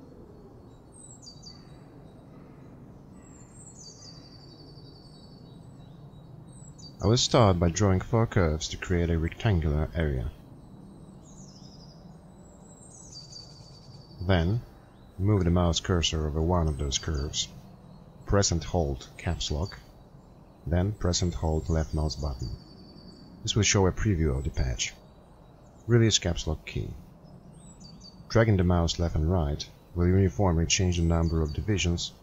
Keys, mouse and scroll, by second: 23.1 Caps_Lock, 23.1 click.